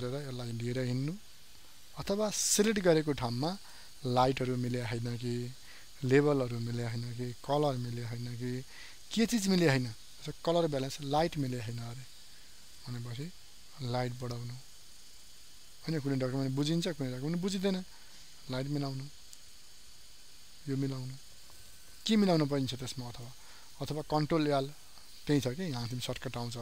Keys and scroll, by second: 1.8 ctrl+z, 24.4 ctrl+l.